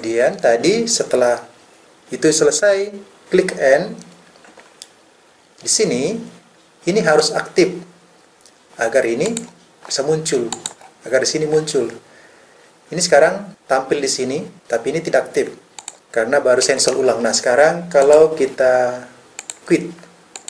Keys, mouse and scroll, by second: 3.6 n.